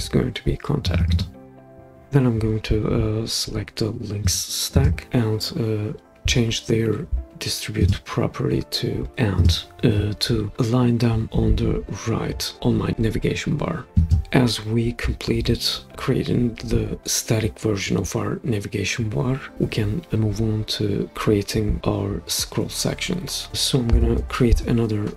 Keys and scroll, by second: 1.4 typing, 23.9 typing.